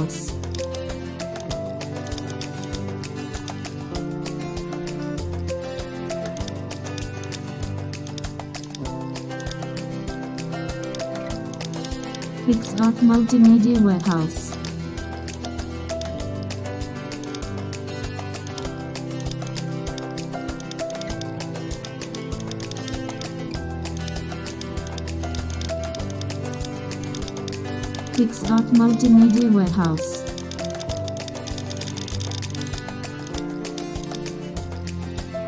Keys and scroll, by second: 13.9 super+space, 32.5 super+space.